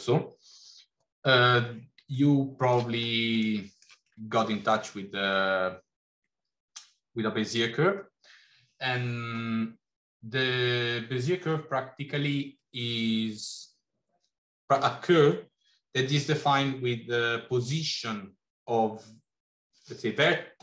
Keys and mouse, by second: 2.0-2.8 shift+middle drag, 3.6 shift+middle click.